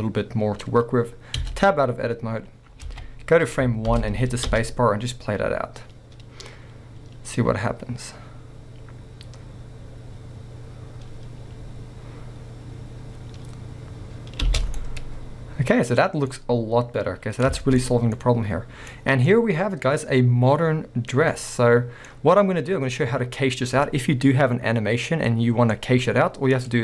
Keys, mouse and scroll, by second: 2.1 Tab, 2.3-2.7 scroll down 2, 2.7 scroll up 2, 2.9 alt+a, 4.1 Left, 4.5 space, 14.8-26.5 middle drag, 15.9-16.3 scroll up 2, 17.8 scroll up 2, 19.0 scroll down 1, 21.1-21.5 scroll down 2, 22.9-25.3 scroll up 2, 26.5 click.